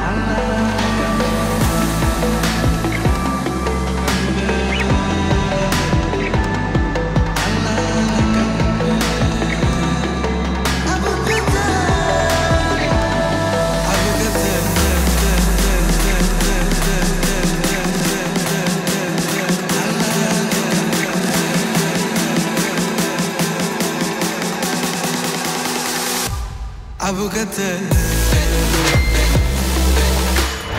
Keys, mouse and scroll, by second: 5.1-6.3 drag, 5.1 typing, 7.9 scroll up 1, 9.1 click, 9.9 ctrl+space, 10.4-12.1 typing, 12.2 click, 15.0-16.2 drag, 23.8 scroll down 1, 25.5-26.5 drag, 28.3 space, 29.4 typing.